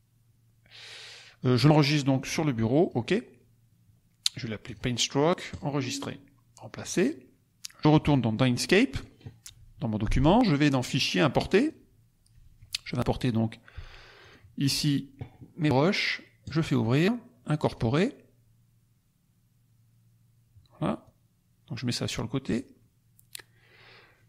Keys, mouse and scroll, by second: 1.3 click, 2.7 click, 4.6 click, 5.4 click, 6.8 click, 8.0 click, 8.9 click, 10.7 click, 11.6 click, 14.1-15.0 drag, 16.4 click, 17.6 click, 20.9-22.8 drag.